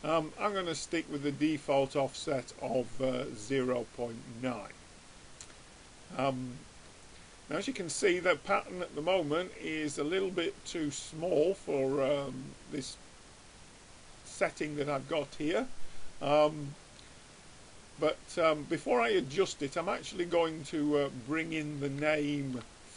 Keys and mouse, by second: 1.9-5.5 drag, 5.9-7.7 drag, 6.5-8.3 middle drag, 6.5-7.8 right drag, 8.7-10.0 drag, 9.4-11.1 middle drag, 9.4 right click, 12.5-14.1 middle drag, 16.7-18.4 drag, 19.3 right click, 19.5-21.5 middle drag, 22.2-22.9 middle drag.